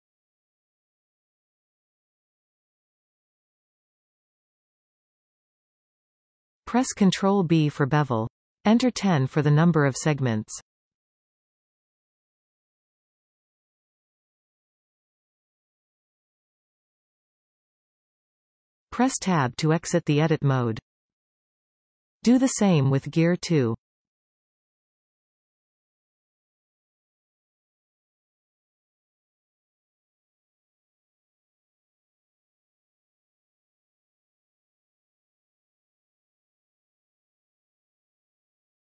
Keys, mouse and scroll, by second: 0.3 shift+click, 1.3-1.7 scroll down 2, 1.7-7.5 middle drag, 7.5 ctrl+b, 12.2 click, 13.4-15.7 drag, 15.7-16.2 scroll up 2, 16.2-18.8 scroll down 1, 18.8 Tab, 20.0-22.6 shift+middle drag, 22.6 click, 23.2 Tab, 23.9-25.5 middle drag, 25.5 click, 26.5 e, 29.3 click, 29.8-32.4 middle drag, 32.4 click, 33.3 shift+click, 33.7 middle click, 34.1 shift+click, 34.2 middle click, 34.7 shift+click, 34.9 middle click, 35.7 shift+click, 35.8 middle click, 36.3 shift+click, 36.5 shift+click, 36.8 shift+middle click, 37.1 shift+click, 37.2 middle click, 37.7 shift+click, 37.9 middle click, 38.5 shift+click, 38.5 shift+middle click.